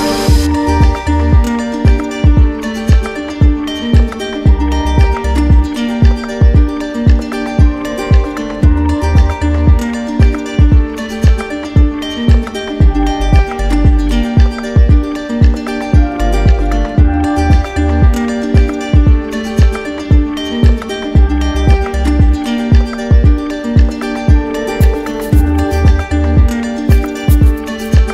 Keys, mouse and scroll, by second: 0.5 right click, 1.7 alt+click, 2.7 shift+click, 4.5 shift+right click, 8.0 alt+click, 8.9 alt+right click, 9.7 right click, 10.4 alt+right click, 11.0 alt+right click, 11.9 right click, 12.3 ctrl+z, 17.6 alt+click, 18.4 right click, 19.2 alt+right click, 19.9 right click, 20.0 ctrl+z, 24.5 alt+click, 27.5 alt+click, 27.7 ctrl+z.